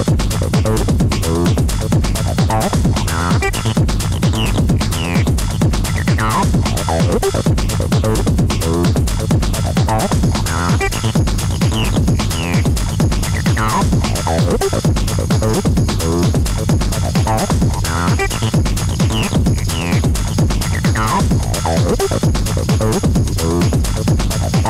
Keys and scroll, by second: 0.2 ], 3.3 4, 4.2 3, 4.8 ], 6.8 ], 8.1 ], 9.2 ], 10.3 4, 10.7 shift+i, 16.1 2, 19.5 4, 23.4 4.